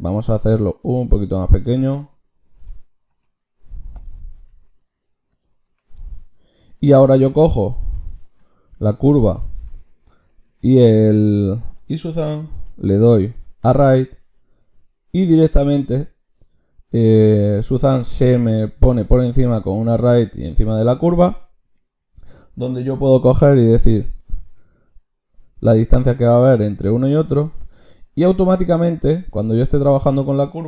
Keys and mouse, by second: 0.1 Tab, 0.7 s, 2.6 ,, 3.1 ., 4.4 s, 5.6 Tab, 6.3-12.5 drag, 12.5 ctrl+shift+q, 19.9-24.5 drag, 29.0-30.6 drag, 29.4 Tab.